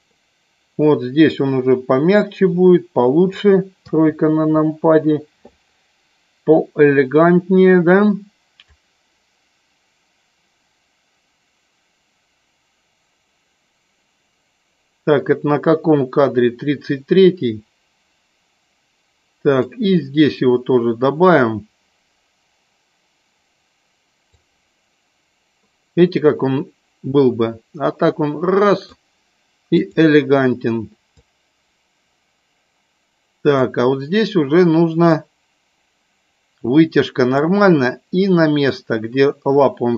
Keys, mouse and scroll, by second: 3.8 KP_3, 4.5 KP_3, 8.6-19.6 drag, 24.4-28.9 drag, 29.8 click, 31.1-33.7 drag, 35.1-37.4 drag, 38.7-39.9 drag.